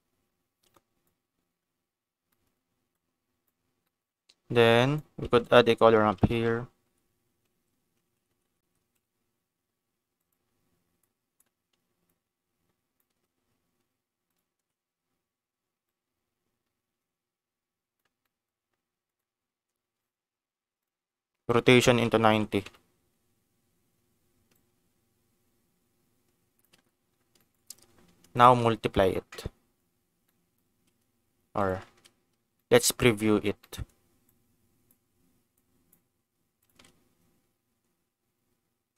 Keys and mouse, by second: 0.7 middle click, 2.3 middle click, 2.9 click, 3.8 middle click, 4.6 click, 5.2 shift+a, 8.3 BackSpace, 9.0 BackSpace, 10.9 click, 12.0 click, 15.8-17.9 drag, 18.3 middle click, 19.0-20.9 drag, 21.5-23.3 drag, 24.6-26.6 shift+drag, 27.4 middle click, 28.4 ctrl+shift+click, 30.2 middle click, 31.7 ctrl+shift+click, 32.5 middle click, 33.8 middle click, 34.2 click, 35.5 click, 36.6 ctrl+shift+click.